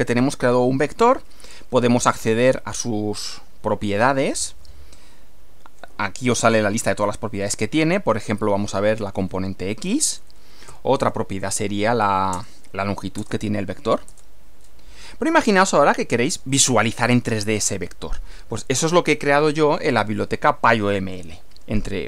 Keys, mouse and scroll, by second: 1.6-3.0 typing, 6.5 Down, 7.0 Up, 8.3 x, 9.1 Return, 10.4-11.8 typing, 12.3 Return, 13.2 Return, 14.1 Return, 15.1 click.